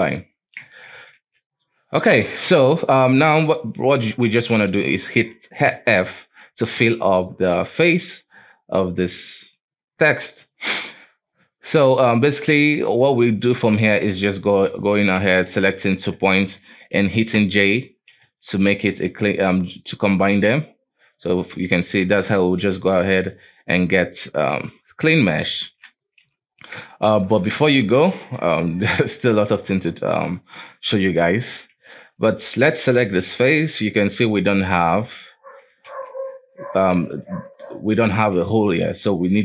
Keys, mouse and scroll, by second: 0.0 KP_7, 0.6 Tab, 1.1 a, 1.7-2.2 scroll down 2, 2.2 shift+middle click, 2.5-4.6 scroll up 2, 6.5 scroll up 2, 6.8 alt+a, 8.1-9.9 scroll down 2, 9.9-10.4 scroll down 1, 10.4-11.3 scroll up 3, 11.3-12.1 scroll down 3, 12.1-12.5 scroll up 1, 12.5-14.3 shift+middle drag, 14.3 right click, 15.4 shift+right click, 15.9-16.4 scroll up 1, 16.4 shift+middle click, 17.3 j, 18.3 alt+a, 20.2 shift+middle click, 21.0 right click, 21.4 shift+right click, 21.8-22.1 scroll up 1, 22.1 j, 22.7 alt+a, 23.0 right click, 23.6 shift+right click, 24.5 j, 25.0 right click, 25.4 shift+right click, 26.2 j, 26.5-26.9 scroll down 2, 26.9 shift+middle click, 27.5 alt+a, 28.2 shift+middle click, 28.6-31.3 scroll up 2, 31.9 alt+KP_3, 32.3 right click, 33.1 g, 34.2 middle click, 34.6-35.8 scroll up 2, 35.8 KP_Decimal, 36.4-36.9 scroll down 6, 36.9 middle click, 37.3-37.6 scroll up 2, 37.6 middle click, 38.1 scroll up 1, 38.4 g, 39.3 middle click.